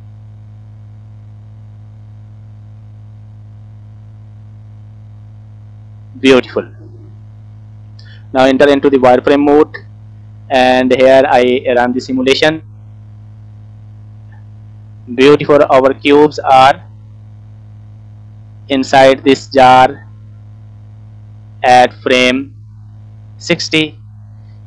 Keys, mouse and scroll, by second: 0.6 click, 1.0-2.2 drag, 3.3 click, 4.4 click, 5.8 click, 7.1-7.7 scroll down 2, 7.5 middle click, 8.7 click, 9.2-9.6 scroll up 1, 10.0 shift+middle click, 10.5-10.8 scroll down 2, 10.7 middle click, 11.4 scroll up 2, 11.9 scroll down 2, 12.2 middle click, 12.9 space, 14.4 scroll up 3, 16.1 space, 18.2-24.2 drag.